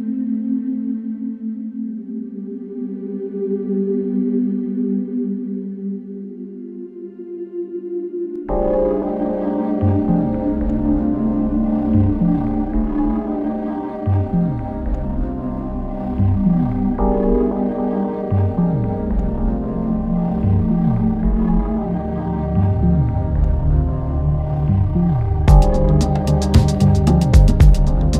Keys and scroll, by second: 1.6 3, 8.0 4, 8.9 3, 9.7 4, 13.6 F1, 15.5 Return, 16.6 3, 19.2 4, 21.3 3.